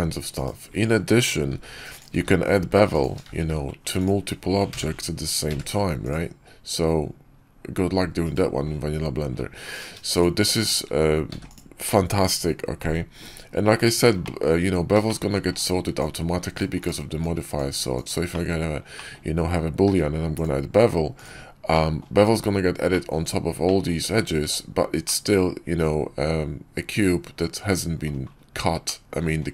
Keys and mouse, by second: 1.4 shift+d, 2.0 shift+d, 3.1 shift+d, 4.6 a, 5.4 q, 10.0 shift+click, 10.4 shift+click, 11.2 x, 14.1 middle drag, 14.9 shift+middle click, 15.5-16.5 drag, 16.7-18.0 drag, 18.2 middle click, 18.8 middle click, 19.8 q, 21.6 drag, 22.8 click, 23.5 drag, 24.3 Tab, 24.9-27.9 drag, 28.7 middle click.